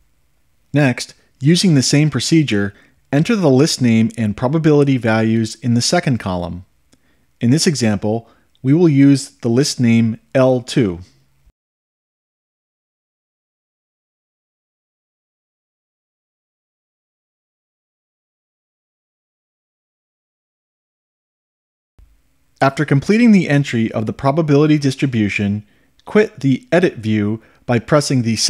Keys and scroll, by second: 1.5 Up, 3.0 Right, 10.8 2, 11.4 Return, 12.6 Down, 13.8 ., 14.4 2, 15.0 5, 15.7 Return, 16.3 ., 17.2 5, 17.7 Return, 18.4 ., 18.9 2, 19.4 5, 20.2 Return.